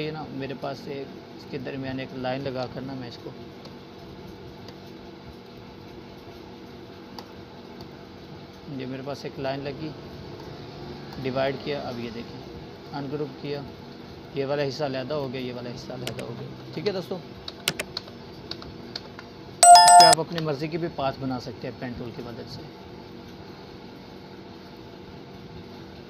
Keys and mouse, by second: 3.5-5.4 shift+drag, 13.5 right click, 14.2-15.7 drag, 17.3 ctrl+z, 21.1 Delete, 22.0-24.8 drag.